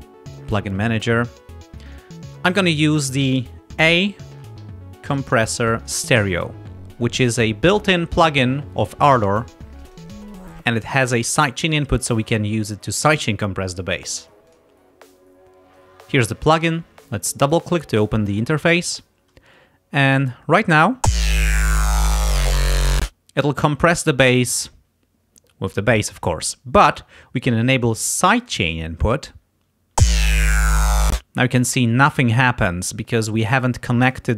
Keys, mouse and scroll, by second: 0.4 click, 3.8-5.8 typing, 9.9 click, 14.6 click, 15.7 click, 17.5 click, 21.0 space, 23.0 space, 28.4 click, 30.0 space, 31.1 space.